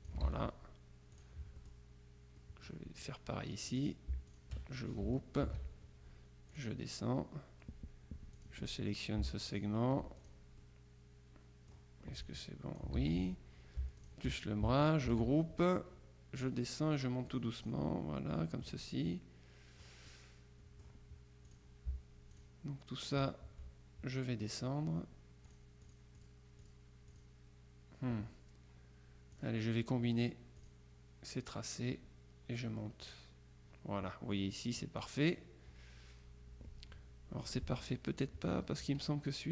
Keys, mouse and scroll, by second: 0.3 ctrl+z, 1.2-2.2 drag, 1.7 middle click, 2.4 middle click, 3.8-5.0 drag, 5.5 ctrl+g, 6.6 click, 8.4 click, 9.5 shift+click, 10.3 click, 10.7 right click, 12.3-13.4 drag, 13.1 ctrl+z, 14.1 shift+click, 15.2 ctrl+g, 16.4-18.2 drag, 18.7-20.4 drag, 21.6 click, 22.4 shift+click, 23.2 click, 25.6-27.2 drag, 29.4 click, 30.6 click, 33.1 click, 35.1 click, 37.6 middle click.